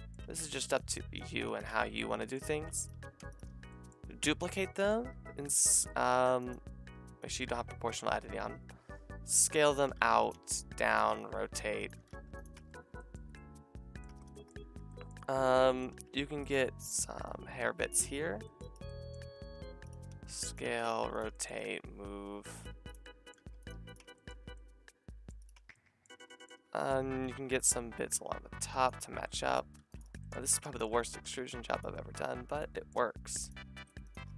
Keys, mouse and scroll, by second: 0.2 c, 1.7 middle click, 1.7 z, 2.5 c, 2.9 z, 3.4 middle click, 4.1 shift+d, 5.1 s, 6.4 click, 6.9 s, 8.7 s, 9.9 g, 10.3 g, 11.0 r, 12.0 g, 12.6 Tab, 14.1 Tab, 14.8 a, 15.9 c, 16.8 c, 19.4-21.5 typing, 22.7 r, 23.4 g, 23.7 r, 24.0 Tab, 24.3 a, 25.4 click, 25.5 Tab, 26.1 a, 26.6 shift+middle click, 27.3 c, 29.8-33.5 typing, 30.3 shift+middle click, 30.8 middle click, 32.7 middle click, 34.3 Tab.